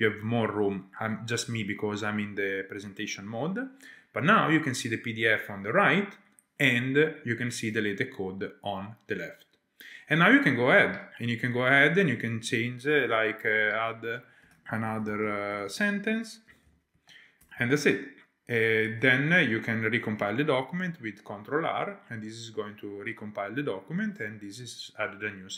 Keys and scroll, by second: 1.4 shift+super+a, 2.8 Return, 13.0 Return, 13.3-14.5 typing.